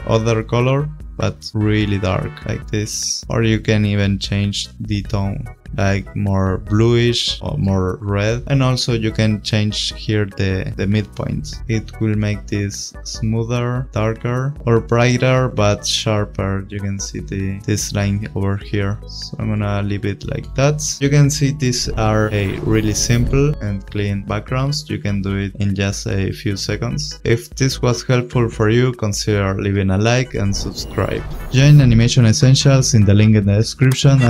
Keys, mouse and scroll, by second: 0.1 click, 3.2 click, 7.0 click, 8.2 click, 10.3 click, 18.7 click.